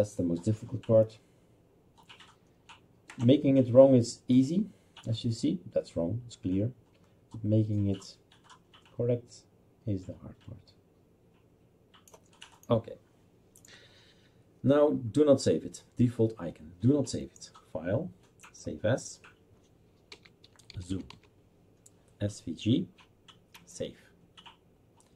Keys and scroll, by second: 20.1-21.8 typing.